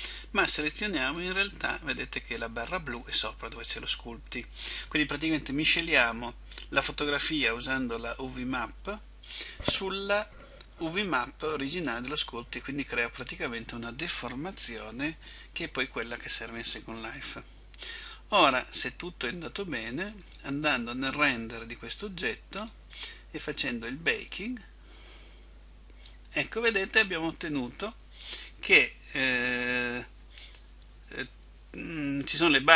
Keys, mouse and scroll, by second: 1.2 click.